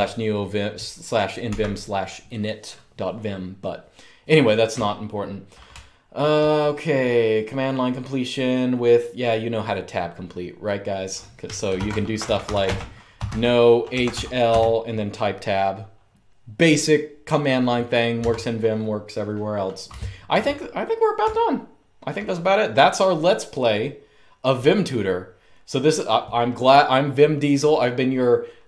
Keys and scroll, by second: 1.2 super+q, 1.4 typing, 4.4-6.0 typing, 11.2-14.3 typing, 18.0 Escape, 19.6-22.0 typing.